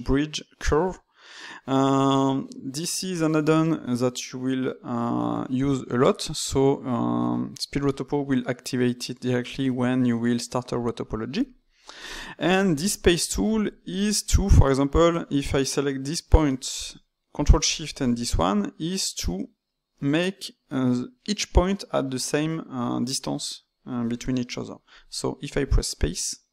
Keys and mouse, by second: 13.6 click, 17.6 ctrl+shift+click, 25.9-26.5 drag.